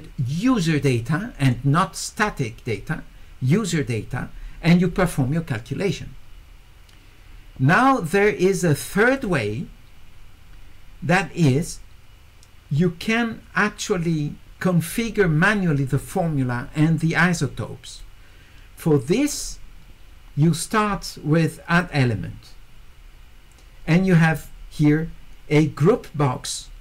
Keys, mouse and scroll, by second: 9.2 click, 21.7 click.